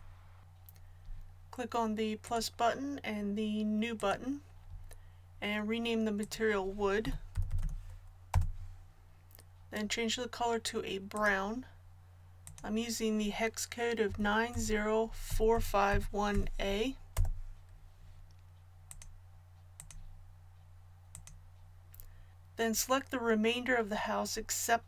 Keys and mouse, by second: 2.2-11.0 drag, 7.5 o, 11.1-24.8 drag.